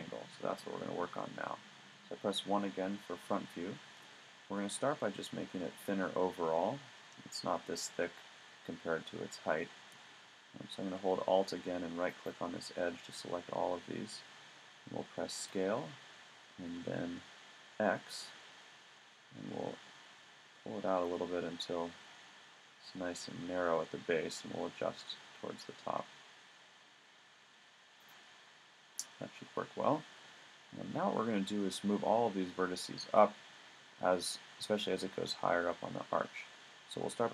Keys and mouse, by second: 0.6 KP_1, 12.1-14.0 drag, 15.4 s, 28.1 click, 28.5-30.0 middle drag.